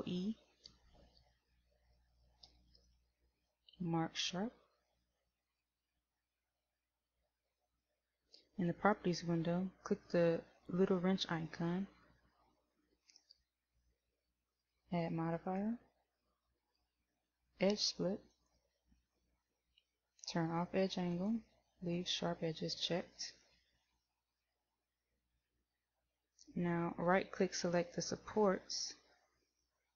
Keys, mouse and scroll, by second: 2.8 ctrl+e, 15.7 click, 21.4 click.